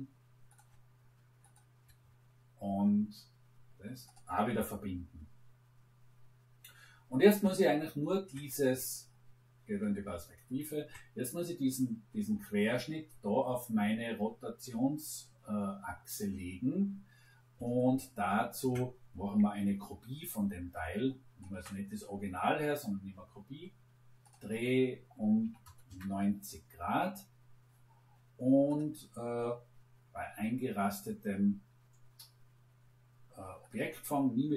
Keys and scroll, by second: 25.4 9, 25.6 0, 25.8 Return.